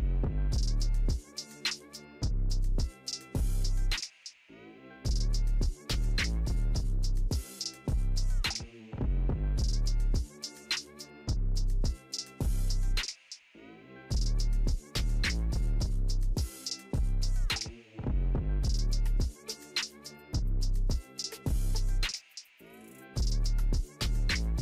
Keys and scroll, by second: 2.6 ctrl+j.